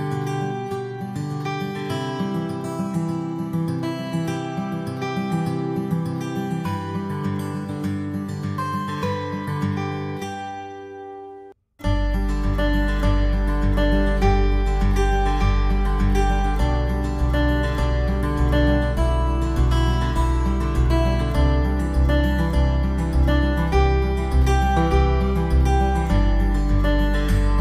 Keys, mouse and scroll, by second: 2.4 click, 4.0 c, 9.4 shift+right click, 10.0 middle click, 12.6 e, 14.0 scroll down 4, 14.3 middle click, 15.8 click, 17.4 ctrl+s, 18.1 scroll down 1, 18.3 middle click, 19.7 middle click, 21.5 click, 22.1-23.1 scroll up 4, 23.1 middle click, 24.8 click.